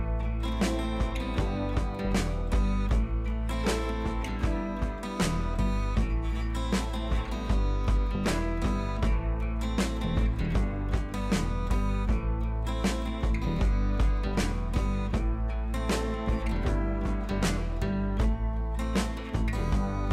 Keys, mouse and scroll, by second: 0.1-1.0 drag, 5.5 click, 7.9 click, 8.7-9.8 scroll down 1, 12.6 click, 14.3 click, 17.6 click, 19.1 click.